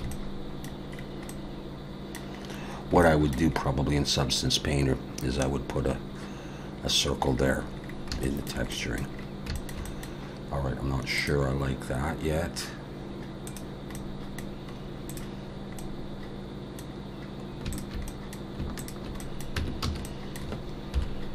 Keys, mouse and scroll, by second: 0.1 middle click, 0.9 scroll down 2, 1.3 middle click, 2.4-3.0 scroll up 4, 3.0 shift+middle click, 3.5-4.4 scroll up 2, 7.3-8.2 scroll down 7, 8.2 shift+middle click, 8.7 middle click, 9.1-9.5 scroll down 2, 9.5 shift+middle click, 9.8 middle click, 14.0 middle click, 14.7-15.8 scroll up 3, 15.1 click, 15.8 middle click, 17.7 shift+click, 18.1 middle click, 18.8 shift+click, 19.2 middle click, 19.6 Tab, 19.8 a, 20.0 middle click, 21.0 KP_7.